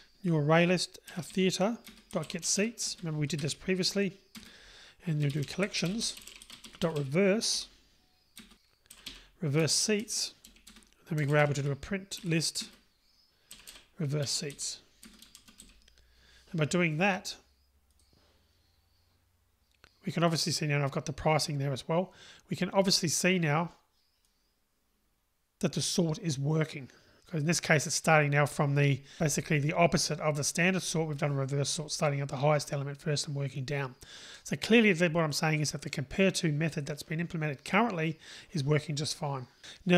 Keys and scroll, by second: 6.9 Return, 8.4 Return, 13.1 Return, 18.0 ctrl+r.